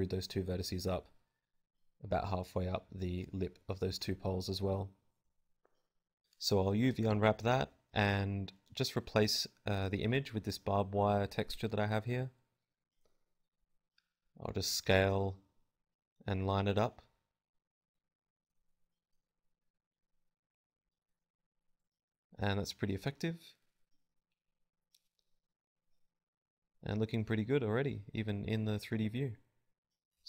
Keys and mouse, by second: 0.7 click, 1.4 z, 1.9 g, 2.5 click, 2.5 z, 2.6 Tab, 3.5 alt+z, 3.6 alt+z, 4.3 Tab, 4.6 a, 4.6 u, 7.1 click, 8.8 a, 8.9 a, 9.3 r, 9.6 click, 9.9 s, 10.9 click, 11.0 g, 12.6-14.1 drag, 12.7 s, 13.1 g, 13.7 s, 15.3 click, 15.4 Tab, 17.4 KP_Divide, 17.8 z, 18.2 a, 20.2-21.4 typing, 20.9 click, 22.5 KP_7, 22.6 z, 23.4 z, 25.3 KP_0, 26.8-30.1 drag.